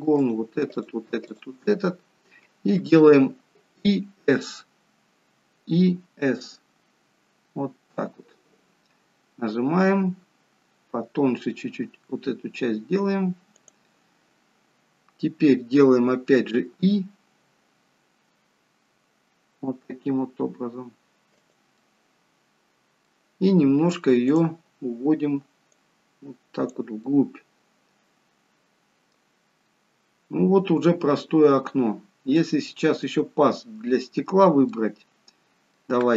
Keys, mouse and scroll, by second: 0.2 shift+click, 21.7 middle click, 24.3 click, 26.0 click, 27.0 middle click, 29.5-30.1 scroll up 1, 30.3-31.1 scroll down 2, 31.1-32.3 scroll up 1, 32.3 middle click, 33.6-34.1 scroll up 2, 34.7 middle click.